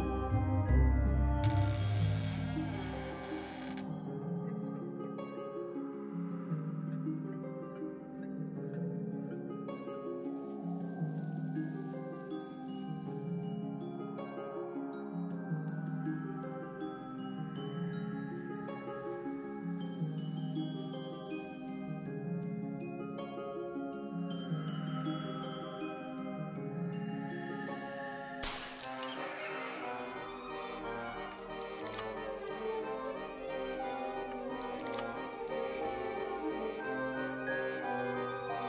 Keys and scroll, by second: 0.0-0.8 typing, 10.9 ctrl+s, 11.5 ctrl+space, 12.6-14.5 typing, 14.8 Return, 17.5 ctrl+s, 32.9 space, 36.3 space.